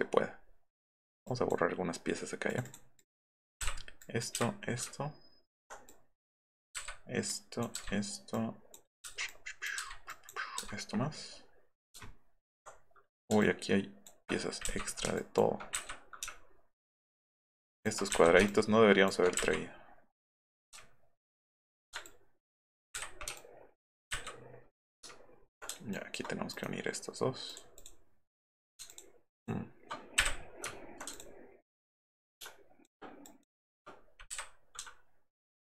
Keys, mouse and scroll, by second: 1.3 drag, 2.5 click, 2.6 click, 2.9-3.2 drag, 3.6 Delete, 4.3 Delete, 4.9 alt+middle click, 5.8-6.5 drag, 6.7 Delete, 7.3-7.6 drag, 7.7 Delete, 8.3-8.7 drag, 9.0 End, 9.3-9.6 drag, 10.1 click, 10.6 Delete, 12.1 alt+middle click, 13.4 ctrl+click, 15.8 Delete, 17.2 ctrl+click, 17.4 ctrl+click, 18.1 Delete, 19.4 Delete, 21.1 alt+middle click, 22.0 ctrl+click, 23.0 Delete, 24.1 Delete, 25.9 ctrl+right click, 26.5 right click, 27.5 click, 27.8 click, 28.3 click, 28.9 ctrl+scroll up 1, 29.3 ctrl+scroll down 1, 30.2 Delete, 30.7 alt+scroll up 1, 31.1 ctrl+click, 31.7-32.8 ctrl+drag, 33.2 ctrl+click, 34.3 Delete.